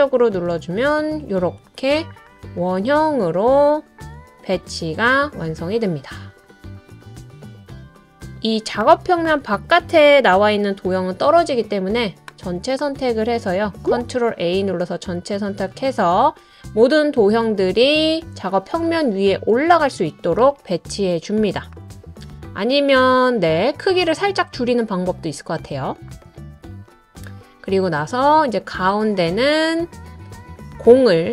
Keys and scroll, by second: 11.2 super+a, 13.8 ctrl+a.